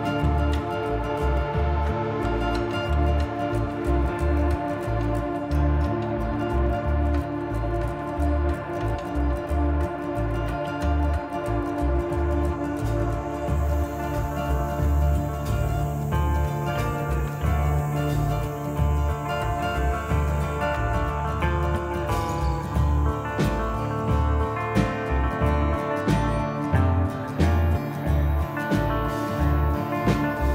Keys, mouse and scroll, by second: 1.5 click, 2.9 middle click, 3.9 click, 6.2 scroll down 2, 6.4 middle click, 7.1-7.5 scroll up 3, 7.5 shift+middle click, 8.5 click, 9.4 scroll down 2, 9.7 middle click, 10.1 scroll down 2, 10.5 shift+middle click, 10.9 shift+middle click, 11.5 middle click, 15.2 shift+d, 16.3 click, 17.5 click, 18.6 middle click, 19.4-20.1 scroll up 2, 20.1 click, 21.3 middle click, 26.2 middle click, 28.0 shift+middle click, 29.8 alt+click.